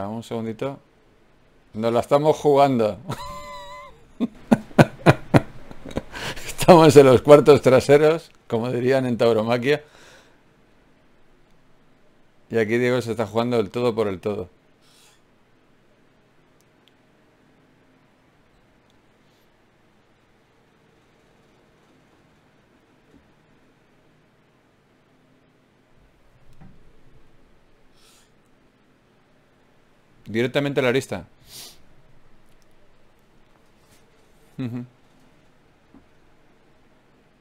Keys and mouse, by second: 2.3-4.3 drag, 3.5 g, 5.1 s, 5.7 g, 6.8 g, 8.3 g, 9.7 r, 11.3-12.5 drag, 13.1 ctrl+Tab, 14.4 click, 15.2 e, 16.5-18.3 drag, 21.2-23.0 right drag, 26.0 w, 28.6 F6, 29.4-31.8 drag, 33.3 click, 36.4 Tab.